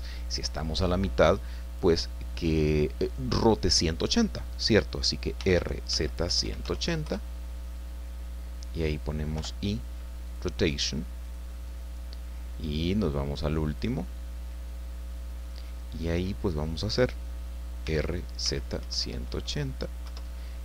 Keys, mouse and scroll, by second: 5.4-6.6 typing, 7.0 KP_Enter, 8.4-8.7 scroll down 2, 9.3 i, 11.2 click, 13.6 click, 17.8-19.3 typing, 20.0 KP_Enter.